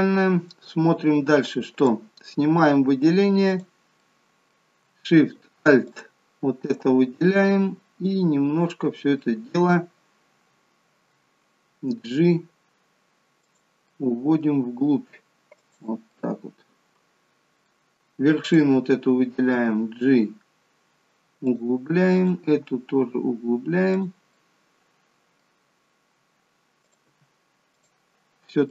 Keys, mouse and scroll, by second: 1.8 click, 3.5 click, 4.0 middle click, 5.9 alt+shift+click, 6.2 alt+shift+click, 7.3 middle click, 12.1 g, 13.8 middle click, 14.7 g, 16.1 middle click, 17.6 middle click, 18.4 click, 19.5 g, 22.1 click, 22.4 g, 24.3 middle click, 26.8 click, 27.0 g, 28.3-28.7 scroll down 1.